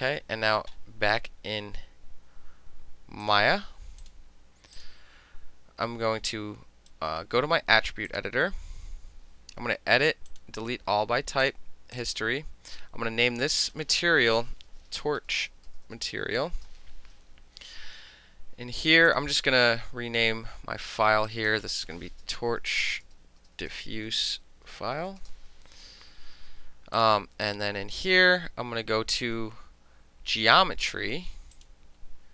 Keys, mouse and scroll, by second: 3.3 click, 4.1 click, 4.8 click, 6.4 right click, 8.2 click, 10.4 click, 11.5 click, 12.0 click, 12.8 click, 13.6 click, 14.6-17.0 typing, 19.2 click, 21.4 click, 22.0-25.7 typing, 27.0 click, 27.5 click.